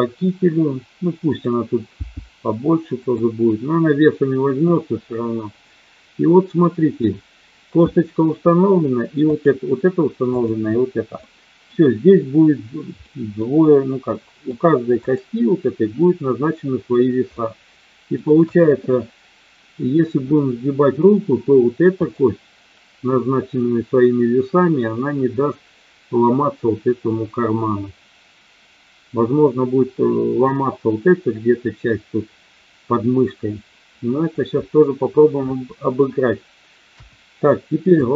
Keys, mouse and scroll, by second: 1.2 click, 1.9 g, 3.1 click, 4.6-6.6 middle drag, 6.7 KP_1, 9.3 click, 10.3 click, 11.2 middle click, 12.9 middle click, 14.1 middle click, 15.1 click, 17.3 middle click, 18.4 KP_1, 21.9 click, 36.8 KP_1, 37.9 shift+middle click.